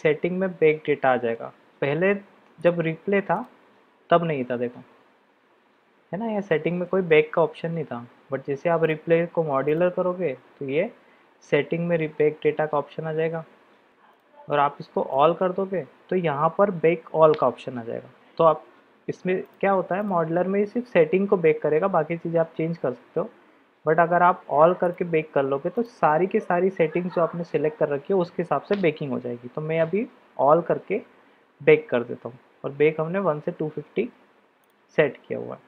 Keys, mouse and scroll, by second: 2.6-4.1 drag, 8.9-9.9 drag, 13.9 click, 14.5-15.3 drag, 19.4-20.1 drag, 24.8-25.9 drag.